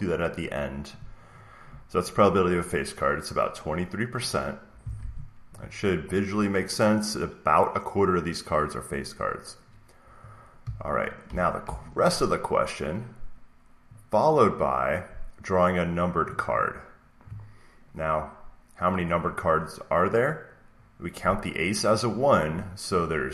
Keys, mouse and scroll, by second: 0.9 Up, 0.9-2.9 drag, 2.9 scroll up 1, 4.7 click, 4.9 alt+Tab, 11.2 alt+Tab, 11.5 alt+Tab, 16.1 click, 21.5 click.